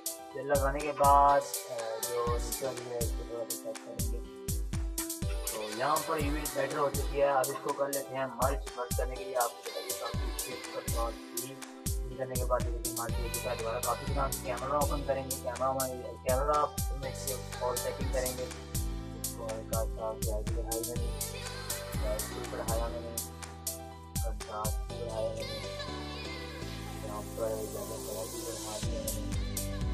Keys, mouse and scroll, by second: 1.0 click, 2.2 Left, 3.0 Down, 3.2 Right, 4.0 click, 4.2 Left, 4.6 Up, 5.4 Down, 6.2 ctrl+-, 11.1 ctrl+shift+e, 13.1 click, 13.1 j, 14.3 a, 18.0 click, 23.5 scroll down 1, 23.5-29.9 drag.